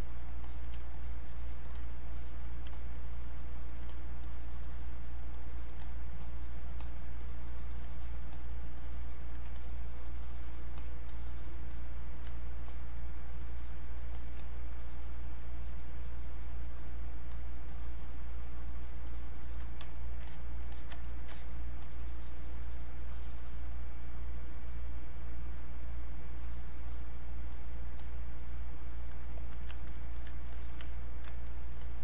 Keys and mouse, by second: 0.9 alt+click, 2.1 alt+click, 2.8 click, 3.1 alt+click, 4.2 alt+click, 5.3 alt+click, 6.2 alt+click, 7.2 alt+click, 8.8 alt+click, 9.6-14.2 drag, 14.7-19.9 drag, 19.9 ctrl+right click, 20.3 click, 20.7 alt+click, 21.1 ctrl+right click, 21.3-25.0 ctrl+drag, 29.9 ctrl+right click, 30.5 alt+click, 30.9 ctrl+right click, 31.5 click.